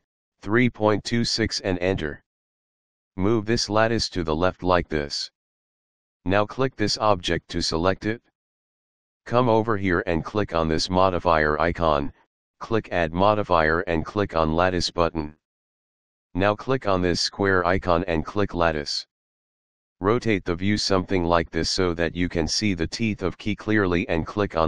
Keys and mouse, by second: 0.0-0.6 typing, 1.7 Return, 3.4 click, 7.2 click, 9.6 click, 11.4 click, 14.1 click, 17.5 click, 21.0 middle click.